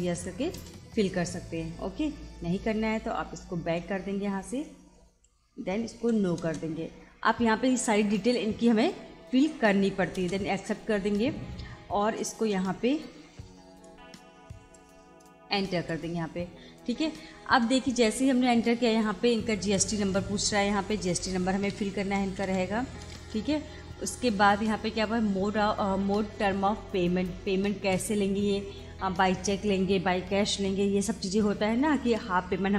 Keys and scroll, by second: 0.2 y, 0.6 Return, 3.8 BackSpace, 6.0 n, 6.4 Return, 10.2 Return, 12.0 Return, 13.9 Return, 17.4 BackSpace, 19.8 BackSpace, 21.0 7, 23.1 Return.